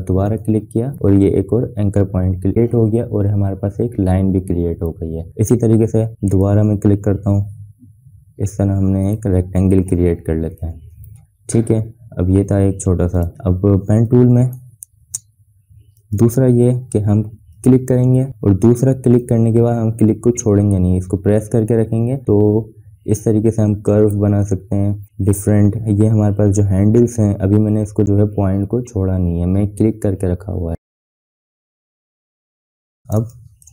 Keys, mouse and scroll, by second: 0.1 shift+click, 5.2 shift+click, 6.2 shift+click, 8.9 shift+click, 10.4 shift+click, 14.8 BackSpace, 15.8-28.0 drag, 33.1 space, 33.3-33.7 drag.